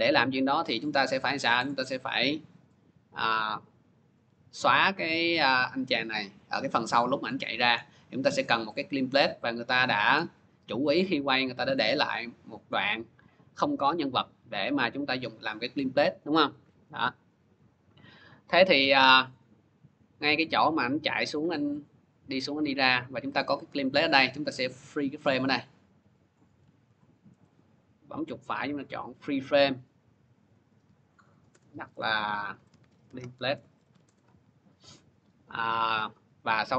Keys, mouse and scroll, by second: 1.5-6.5 drag, 8.3-13.0 drag, 25.1 click, 26.7 ctrl+d, 27.3 right click, 29.5 click, 30.3 click, 30.9 click, 31.3 Return, 32.1-34.2 typing, 36.1 click, 36.6 click.